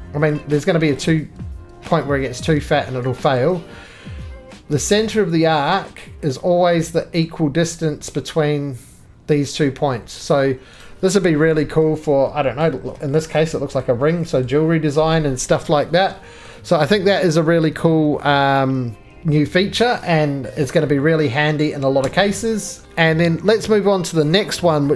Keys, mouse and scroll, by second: 0.0 middle click, 0.1-1.7 scroll up 12, 0.3 middle click, 1.0 shift+middle click, 2.6 middle click, 2.8-3.4 scroll up 1, 3.4 shift+middle click, 7.3 middle click, 8.1 middle click, 8.1-10.2 scroll down 2, 10.3-10.8 scroll down 2, 10.8 right click, 11.0-11.4 scroll down 9, 11.8 middle click, 11.8-12.8 scroll, 12.9 scroll down 3, 13.2 shift+middle click, 13.8 middle click, 13.9 scroll, 14.4 middle click, 14.8-15.1 scroll, 15.5 middle click, 16.0 Caps_Lock, 16.0 scroll down 5, 16.5 middle click, 17.9 middle click, 18.3 middle click, 18.4 middle click, 18.9-19.9 scroll, 19.1 middle click, 19.9 middle click, 22.0 x, 22.8 shift+middle click, 22.8 scroll, 24.3 click.